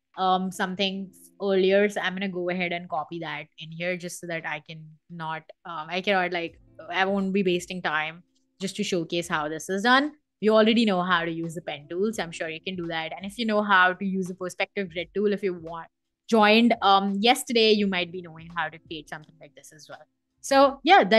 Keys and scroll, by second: 2.4 super+c, 2.7 Escape, 3.3 Escape, 3.8 super+v.